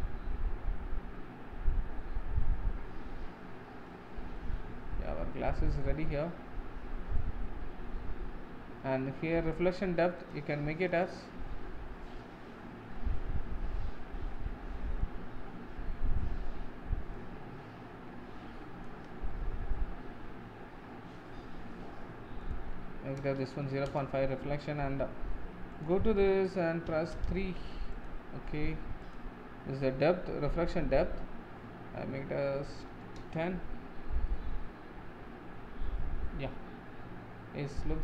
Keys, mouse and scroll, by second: 4.4 middle click, 4.7 scroll up 2, 5.3 shift+middle click, 6.0-6.7 scroll down 1, 10.3-12.9 drag, 12.9-17.3 middle drag, 17.3-19.3 drag, 19.3-23.9 middle drag, 23.9-33.2 drag, 34.3-37.3 middle drag.